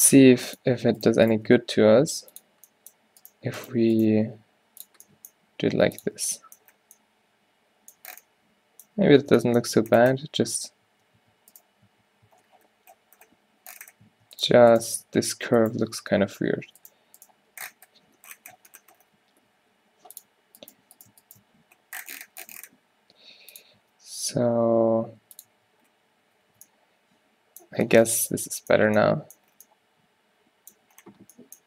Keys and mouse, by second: 0.1 g, 1.5 g, 2.7-4.1 middle drag, 4.1 g, 5.4 g, 6.2 Tab, 9.2 Tab, 10.7 Tab, 11.1 Tab, 11.2 Tab, 11.8 click, 11.9 Tab, 12.4 Tab, 14.5 Tab, 14.7 Tab, 15.0 Tab, 16.5 o, 17.4 g, 18.9 click, 20.7-23.2 drag, 20.9 g, 21.5 g, 23.9 Tab, 24.5 Tab, 24.6 g, 25.7 Tab, 26.6 a.